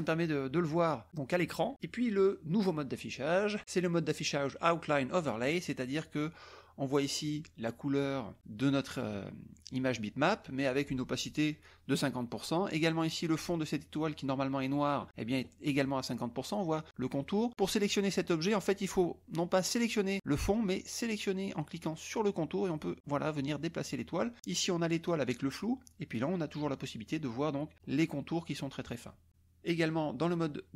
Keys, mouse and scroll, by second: 2.2 click, 4.8 click, 7.3 drag, 9.1 drag, 13.3 click, 17.7 drag, 18.7 click, 19.6 click, 22.1 click, 22.7-24.0 drag, 24.5 click, 26.5 click, 27.2 click.